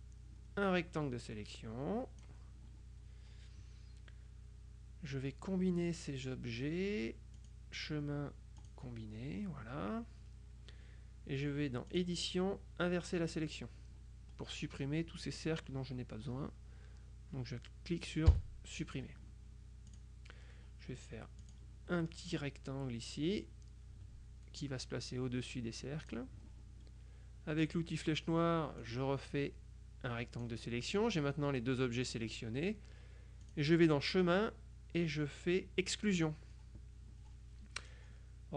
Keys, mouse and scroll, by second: 7.5 click, 8.7 click, 12.0 click, 13.4 click, 18.4 Delete, 20.0 click, 21.5 click, 22.1 middle click, 23.5-26.6 drag, 27.7 click, 28.9-31.0 drag, 33.5 click, 36.2 click.